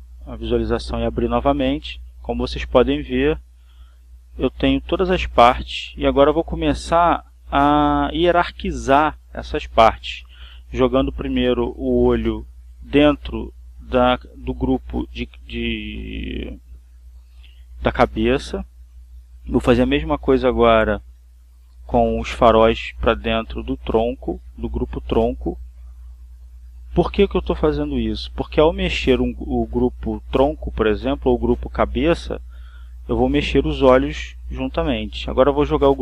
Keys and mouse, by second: 3.1 click, 5.0-8.6 drag, 9.6-12.6 drag, 14.8 click, 16.0 click, 17.2 click, 19.1 click, 20.6-23.1 drag, 23.9-27.3 drag, 28.3 click, 31.4 click, 33.7-34.8 drag, 34.9-36.0 drag.